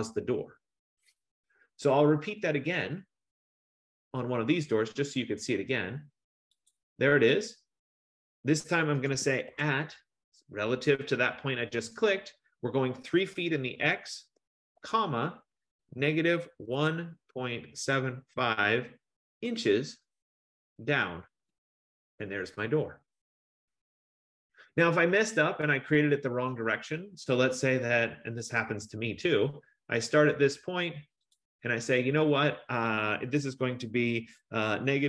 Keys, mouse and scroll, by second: 3.7 click, 6.8 click, 9.6 @, 13.8-20.0 typing, 21.6 Return, 25.3-26.6 scroll, 28.6 click, 30.6 F15, 31.4 click, 32.3-33.6 scroll, 34.6-35.0 typing.